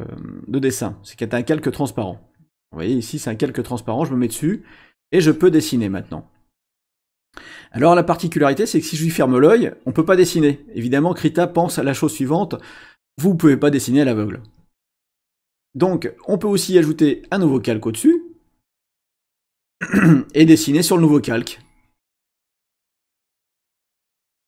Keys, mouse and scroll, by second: 2.3 click, 4.1 click, 5.0-6.4 drag, 8.6 click, 9.6-10.5 drag, 15.4 click, 17.1 click, 21.2 click, 23.4 click.